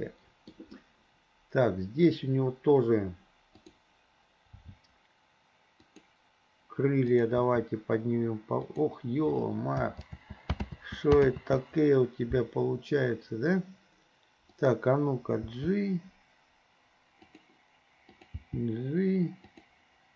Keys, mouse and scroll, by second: 3.6 click, 4.6 g, 7.1 click, 7.4 g, 10.1 ctrl+z, 10.7 ctrl+z, 11.3 ctrl+z, 14.6 click, 15.6 g, 18.1 click, 18.4 g.